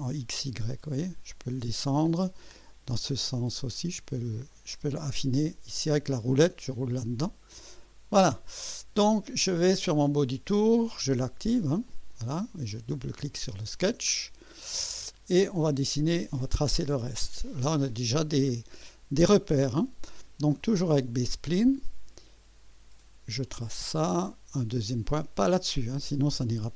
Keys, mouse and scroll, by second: 0.2 scroll up 2, 0.8 scroll down 1, 2.7 click, 3.4 scroll up 1, 3.8-4.1 scroll down 1, 7.7 click, 10.5 click, 11.0 right click, 11.9 click, 13.2 click, 14.1-14.4 scroll up 1, 14.6-15.3 right drag, 15.6-16.4 right drag, 21.0 click, 23.4 click.